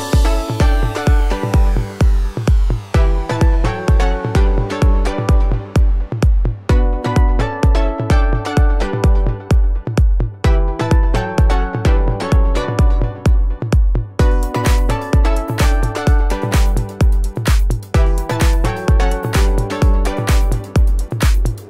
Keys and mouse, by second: 0.5-3.1 shift+middle drag, 3.1 click, 3.2 shift+middle click, 3.3 shift+click, 3.5-4.9 middle drag, 3.6 alt+s, 5.1-12.3 shift+middle drag, 5.2 1, 5.7 g, 7.3 g, 9.1 k, 10.9 m, 12.6 shift+click, 12.9-14.0 alt+shift+middle drag, 14.7-21.4 ctrl+middle drag, 14.7 g, 15.6 k, 16.7-20.7 typing.